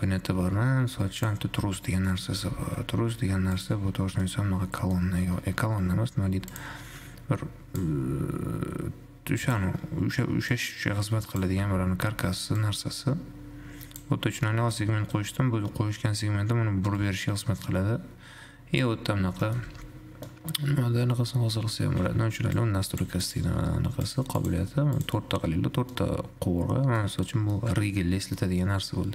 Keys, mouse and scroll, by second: 0.0 click, 1.4-2.3 drag, 2.3 middle click, 2.8 g, 3.8 `, 4.5-5.3 middle drag, 5.3-6.8 scroll up 2, 6.8 click, 8.0-11.8 shift+drag, 11.8 shift+z, 12.3 shift+z, 12.5 shift+z, 12.8-14.8 drag, 14.8 middle click, 15.0-17.3 scroll up 4, 17.3-19.3 drag, 19.3-19.8 scroll down 5, 19.8 shift+z, 20.3 scroll down 1, 20.5-21.8 middle drag, 21.8-22.3 scroll up 1, 22.3-22.8 scroll down 1, 22.8-25.3 drag, 25.8-26.3 scroll up 5, 26.3-27.3 middle drag, 27.3 scroll down 1, 27.5-28.3 middle drag, 28.3 `, 28.8-29.1 middle drag.